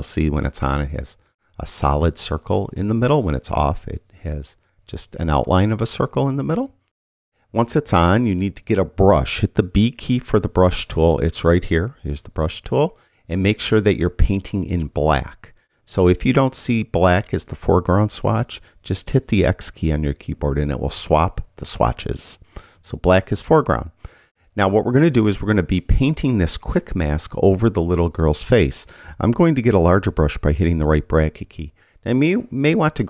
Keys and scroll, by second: 10.2 b, 20.0 x, 22.2 x, 30.5 ].